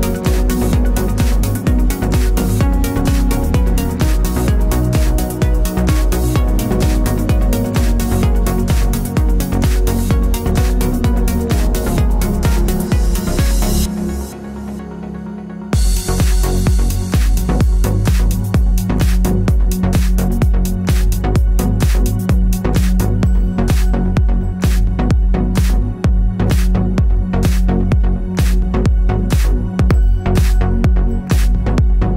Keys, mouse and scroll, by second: 3.8 KP_3, 4.4 KP_6, 4.6 KP_Enter, 5.7-7.5 typing, 7.3 click, 8.8 click, 9.3 KP_6, 9.6 KP_0, 9.7 KP_Enter, 12.7 KP_Enter, 12.8 click, 13.5-15.7 typing, 16.1 KP_Enter, 17.2 click, 17.9-19.3 typing, 19.9 click, 27.7 KP_9, 28.0 KP_0, 28.1 KP_Enter, 29.5 click.